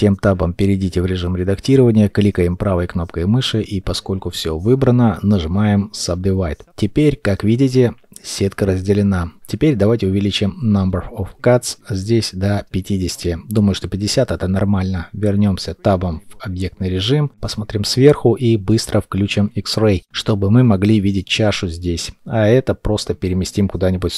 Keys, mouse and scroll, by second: 0.5 shift+middle click, 1.6 right click, 10.1 Return, 11.8 middle click, 12.2 Tab, 13.8 7, 17.0-18.8 scroll up 1, 18.8 g, 22.3 shift+middle click, 23.8 shift+middle click, 23.8 shift+middle click.